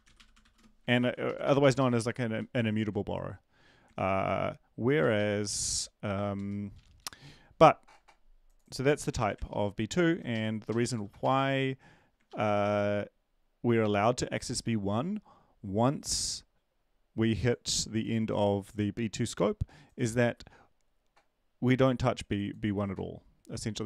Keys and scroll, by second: 0.0 Delete, 0.0 ctrl+v, 0.4-1.7 typing, 2.3 ctrl+Left, 3.9 ctrl+Right, 5.0 ctrl+Right, 5.1 ctrl+Right, 5.6 End, 6.2 Down, 6.3 Down, 6.7 Up, 7.0 Up, 7.2 Up, 9.5 ctrl+shift+Left, 10.0-10.7 ctrl+shift+Left, 10.7 shift+Left, 10.8 shift+Left, 11.2 BackSpace, 12.3 ctrl+s.